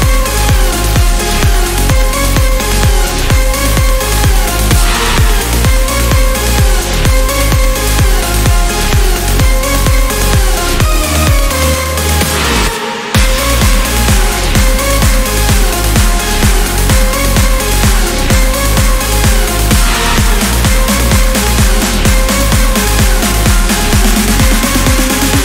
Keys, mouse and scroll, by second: 1.5 click, 3.0 click, 4.6 click, 6.3 click, 6.8 scroll down 2, 7.9 click, 8.9-9.4 scroll up 2, 9.6 scroll down 2, 10.9 click, 13.7 click, 14.4 scroll down 2, 21.9 click, 22.8 click, 24.7 click.